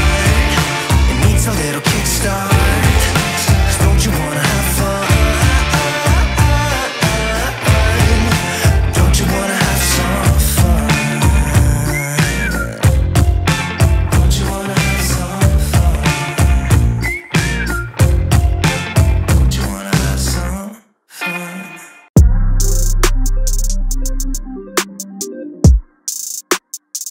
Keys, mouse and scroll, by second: 5.3 right click, 7.6-24.7 drag.